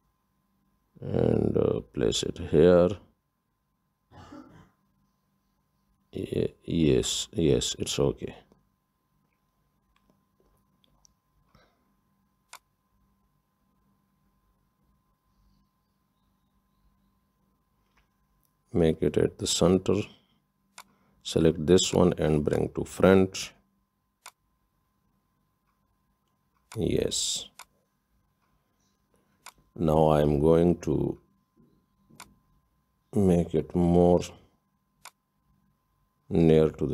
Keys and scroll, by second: 15.0 Up, 15.2 Up, 15.4 Up, 15.5 Up, 15.9 Up, 16.7 Up.